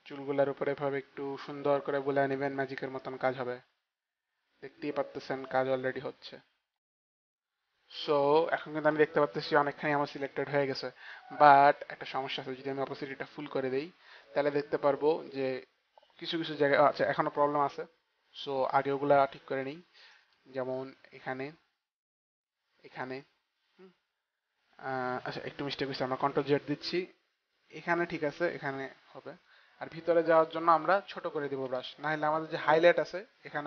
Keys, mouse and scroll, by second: 12.7 click, 19.2 click, 25.7 ctrl+z, 27.1 ctrl+z, 27.1 click, 33.0 click.